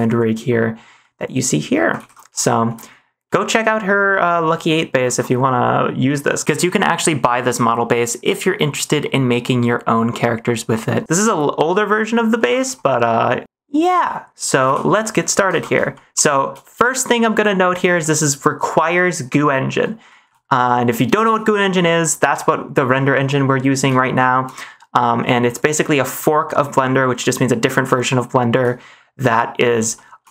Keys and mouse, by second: 0.1 click, 0.1 middle click, 0.3 click, 0.9 middle click, 2.0 ctrl+s, 2.5 shift+middle click, 3.3 shift+middle click, 3.9 middle click, 8.3 middle click, 9.0 ctrl+s, 9.2-11.0 middle drag, 11.5 middle click, 12.6 ctrl+s, 12.8 middle click, 14.0-14.4 middle drag, 14.6 ctrl+s, 15.0 middle click, 15.5 ctrl+s, 15.9 shift+middle click, 16.6 shift+middle click, 18.0-18.8 shift+middle drag, 20.0 shift+middle drag, 20.8 middle click, 24.2 shift+middle click, 25.2 middle click, 28.1 shift+middle click, 29.9 shift+middle click.